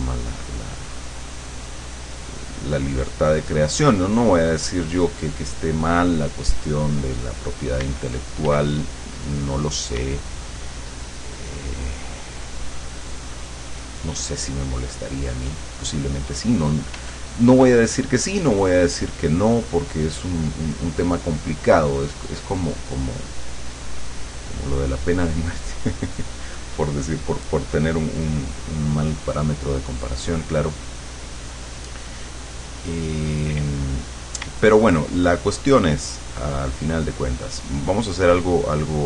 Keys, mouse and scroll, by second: 7.4 right click, 7.9 d, 8.5 click, 8.7 f, 8.8-10.1 drag, 10.1 d, 10.7-15.1 drag, 15.3 click, 16.7 click, 17.0 f, 17.3-29.0 drag, 31.3 click, 32.8 click, 33.2 click, 34.1 click, 34.5 d, 35.4-36.5 drag, 36.7-37.9 drag, 38.1-39.0 drag.